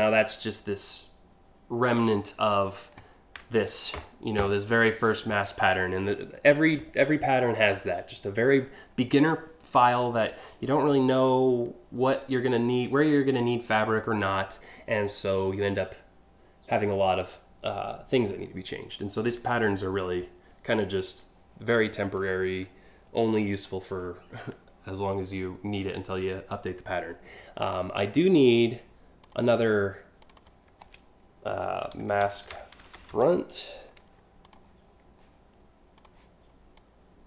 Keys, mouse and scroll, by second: 27.3 click, 27.6 click, 28.8 click, 29.8 click, 30.0 click, 31.5-33.1 typing, 34.1 click, 35.6 click, 36.4 click.